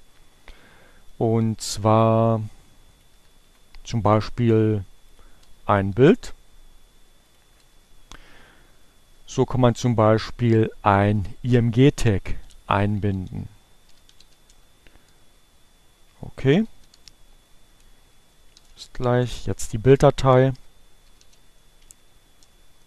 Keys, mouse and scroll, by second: 1.0-2.3 drag, 2.2 Delete, 6.9-7.9 drag, 7.9 Delete, 9.7 click, 9.8 BackSpace, 11.4 click, 11.7 BackSpace, 12.7-13.9 drag, 16.2-19.6 typing, 21.3-22.8 typing.